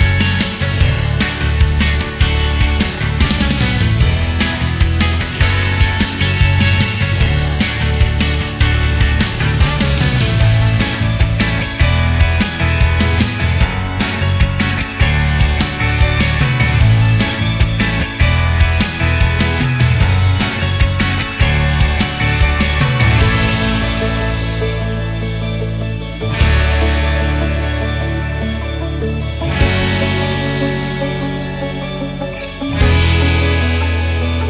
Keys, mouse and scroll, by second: 0.2 shift+middle click, 0.7 alt+shift+middle click, 1.5 shift+right click, 3.1 shift+click, 3.3 shift+double click, 3.5 click, 3.8 click, 4.0 click, 4.2 click, 4.5 click, 4.8 click, 5.3 ctrl+click, 6.1 ctrl+click, 6.4 ctrl+click, 6.7 ctrl+double click, 6.9 ctrl+click, 7.7 ctrl+click, 8.0 click, 8.4 ctrl+click, 8.6 double click, 8.8 click, 9.2 double click, 9.5 click, 9.8 click, 10.0 click, 10.3 click, 10.6 click, 10.7 click, 10.9 click, 11.1 click, 11.3-13.2 drag, 13.4-14.5 alt+drag, 14.8-19.8 alt+shift+drag, 20.0 alt+click, 21.9 alt+click, 22.5 scroll up 1, 22.6 click, 23.3 click, 25.3 click, 26.5 click, 27.5 click, 28.5 scroll up 1, 29.0 click, 30.7 click, 31.5 click, 31.7 double click, 31.8 click, 32.0 click, 32.1 click, 32.4 alt+click, 32.9 alt+click, 33.3 alt+click, 33.6 alt+double click, 33.8 click, 34.0 click, 34.1 double click, 34.3 alt+click.